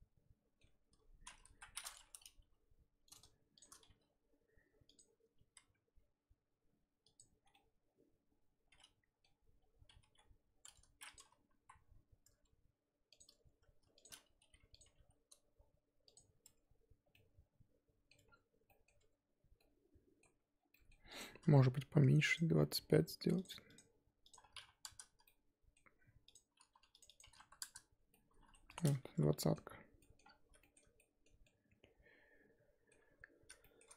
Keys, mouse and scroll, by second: 0.6 Tab, 0.9-1.5 scroll up 1, 1.5 KP_1, 1.9 click, 2.0-2.4 scroll up 1, 2.4 g, 3.6 shift+click, 3.9 g, 5.4 r, 7.4 scroll down 3, 7.5-9.2 middle drag, 9.2 scroll up 4, 10.0 g, 11.6 KP_1, 13.2 click, 14.0 shift+click, 14.4 r, 14.8 g, 16.4 Tab, 16.6-17.1 scroll down 5, 17.1-18.1 middle drag, 18.1 Tab, 18.2-18.7 scroll up 1, 18.7 middle click, 19.0 Tab, 19.6 middle click, 20.5 scroll down 3, 20.8 middle click, 21.1 click, 24.8 click, 25.2-27.6 middle drag, 27.6 click, 28.1 middle click, 28.7 click, 29.2 z, 29.3 middle click, 30.2-30.6 scroll up 4, 30.6-33.8 shift+middle drag, 33.8-33.9 scroll up 1.